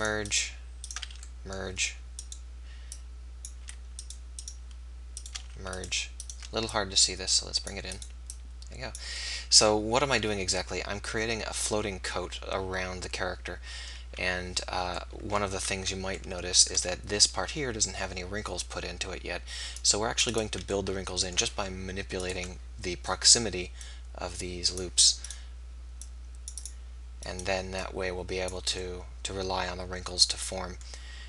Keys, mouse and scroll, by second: 1.1 f, 4.3-5.5 drag, 4.3-5.5 right drag, 5.5 f, 8.7-12.7 drag, 8.7-9.9 right drag, 9.6 middle click, 15.0 middle click, 16.8 middle click, 19.8 right click, 20.1 click, 20.8 middle click, 22.0 middle click, 22.2-24.1 right drag, 23.9-25.5 drag, 23.9 middle click, 25.3-27.1 right drag, 26.1-30.8 drag, 27.3-29.5 right drag.